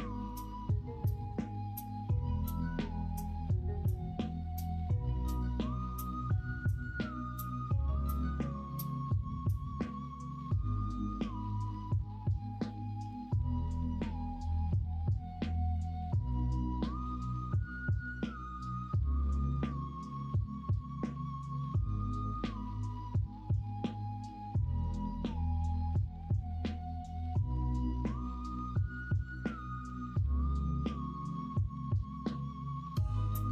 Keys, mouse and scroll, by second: 0.2 3, 3.2-5.7 drag, 5.7-7.3 middle drag, 7.3 scroll down 1, 7.8 middle click, 8.5 scroll down 1, 9.5-10.9 middle drag, 10.9 scroll down 1, 11.8 middle click, 12.7 middle click, 13.3-15.8 middle drag, 16.1 scroll up 1, 17.4 scroll up 1, 17.5 middle click, 18.0 scroll down 1, 20.4-21.5 middle drag, 21.7 Tab, 22.4-23.4 middle drag, 23.8 middle click, 27.5 ctrl+KP_Subtract, 28.4 middle drag, 29.5 middle drag, 30.2-31.2 middle drag, 31.6-32.1 middle drag.